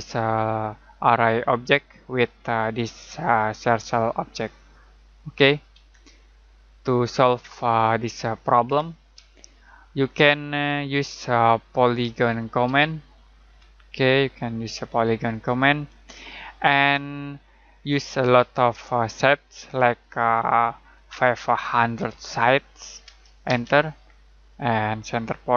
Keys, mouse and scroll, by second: 5.7 Escape, 7.6 click, 8.6 Delete, 12.0-13.5 typing, 15.4 click, 21.1-22.0 typing, 23.4 space.